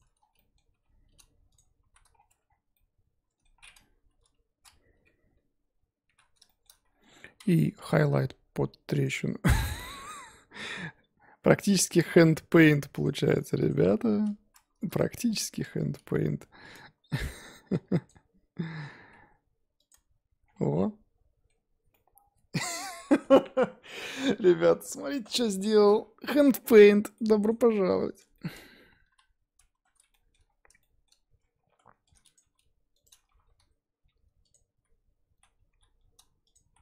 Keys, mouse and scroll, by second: 0.7 g, 1.9 z, 2.1-2.7 scroll down 7, 2.2 Tab, 2.7 middle click, 3.5-4.1 scroll up 2, 4.1 KP_1, 4.9 Tab, 5.4-6.3 scroll up 2, 6.4 shift+middle click, 6.8-7.7 scroll up 1, 7.7 k, 15.0 click, 16.7 ctrl+click, 18.0 click, 18.8 g, 19.9 Tab, 20.4-20.8 scroll down 10, 20.8-26.6 middle drag, 26.6-27.1 scroll up 3, 27.1 middle click, 27.6-28.2 scroll up 1, 28.2-29.0 scroll down 2, 28.3 middle click, 29.0 KP_1, 29.7 Tab, 30.1 shift+middle click, 30.4-30.8 scroll up 2, 30.8 shift+middle click, 31.6-32.0 scroll up 2, 32.3 click, 32.4 g, 33.8 1, 34.4 click, 34.8 z, 35.4 z, 35.7 g, 36.7 z.